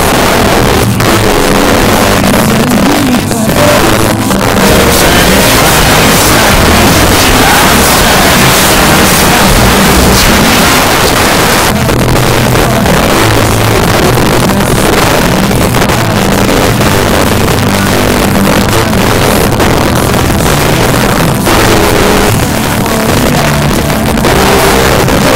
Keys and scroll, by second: 10.8 Page_Down.